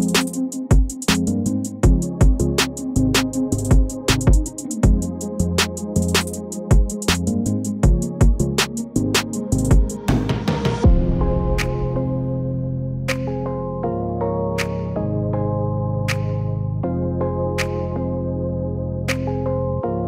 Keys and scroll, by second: 1.1-1.6 shift+space, 2.8-3.2 space, 16.6 space, 17.1 space.